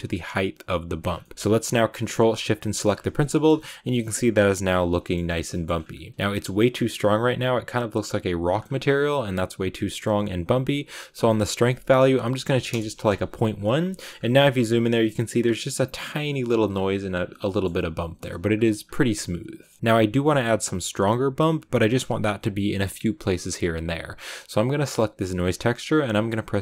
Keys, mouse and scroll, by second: 3.2 shift+middle click, 3.4-5.1 shift+scroll up 2, 5.1-12.6 middle drag, 12.6-13.8 drag, 13.8 shift+middle click, 14.0 scroll up 3, 16.6-17.0 scroll down 2, 17.1 scroll down 3, 17.4-18.7 shift+middle drag, 18.7 scroll down 1, 19.0 a, 19.5 middle click, 19.8-26.6 drag.